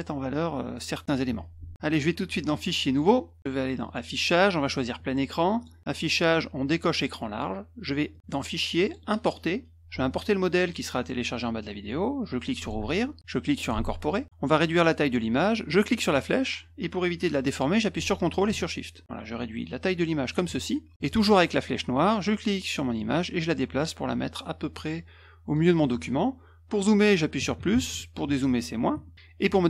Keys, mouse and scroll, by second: 1.3 F1, 1.4 click, 2.4 click, 2.9 click, 3.8 click, 4.7 click, 5.6 click, 6.9 click, 8.1 click, 8.8 click, 10.6 click, 12.6 click, 13.6 click, 15.5-20.3 drag, 21.0 click, 21.4 click, 22.9-25.5 drag, 28.3 -, 28.5 -, 29.1 -.